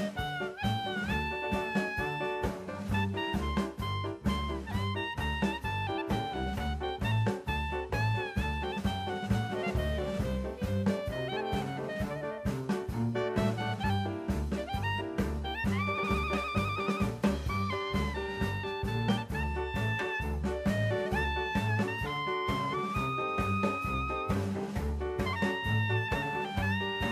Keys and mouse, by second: 0.1 ctrl+z, 0.5 middle click, 1.6 click, 2.9-4.0 drag, 4.3 middle click, 5.2 s, 6.2 drag, 6.6 middle click, 7.2-8.4 drag, 8.6 e, 9.5 click, 10.6 Tab, 13.6 KP_1, 15.9 Tab, 17.3 a, 18.1 shift+middle click, 19.1 shift+d, 19.6 right click, 20.1-21.4 drag, 22.6-24.2 typing, 24.6 KP_Enter, 25.3 shift+middle drag, 25.9-27.1 drag.